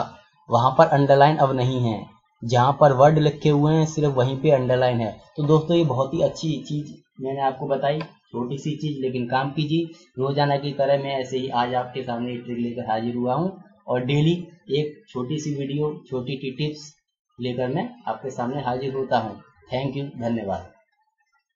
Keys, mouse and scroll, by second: 1.3 click, 1.8 double click, 2.7 click.